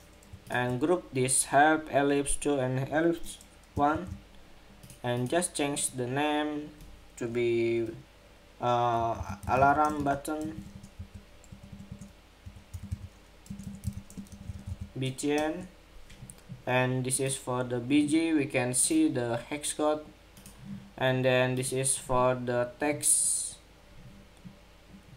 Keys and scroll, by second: 3.6 super+g.